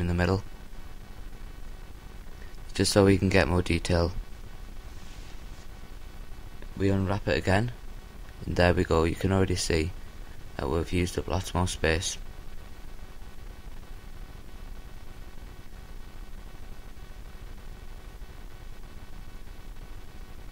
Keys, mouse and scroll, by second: 2.8-5.2 right drag, 5.2-7.3 drag, 6.4 a, 7.3 a, 8.8 u, 13.0 a, 15.7-17.2 middle drag, 15.7 l, 17.2 s, 19.0-20.5 drag, 19.0 g.